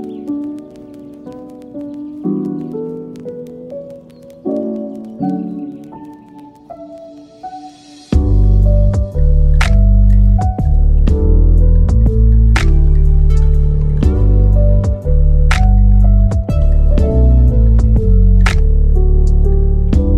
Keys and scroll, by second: 0.9 super+d, 2.5 super+z, 4.0 super+d.